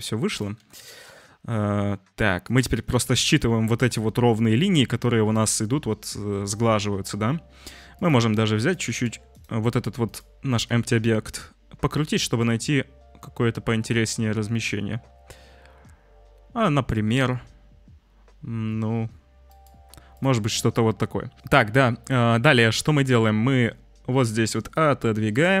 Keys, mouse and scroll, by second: 0.5 g, 7.9 click, 8.8 g, 10.0 click, 10.5 g, 24.7-25.6 drag.